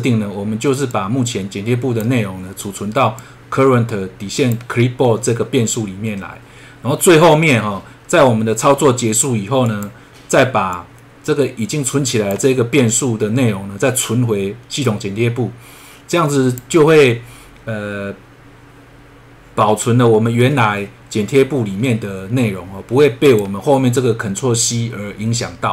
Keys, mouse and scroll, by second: 0.9 click, 3.2 click, 9.6 click, 10.7 click, 14.8 click, 23.2 click.